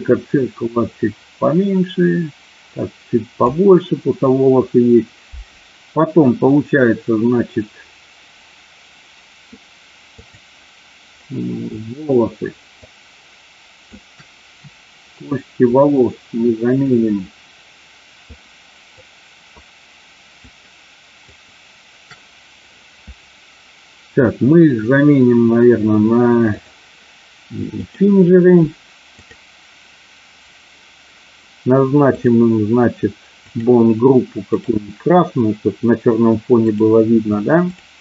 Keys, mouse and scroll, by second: 1.1-3.3 drag, 10.2 click, 12.9-14.0 shift+drag, 15.7-17.0 shift+drag, 18.4 shift+click, 20.4 shift+click, 21.1 shift+click, 26.5-28.0 drag, 32.0 click, 33.4 click, 34.4 click, 36.9 click.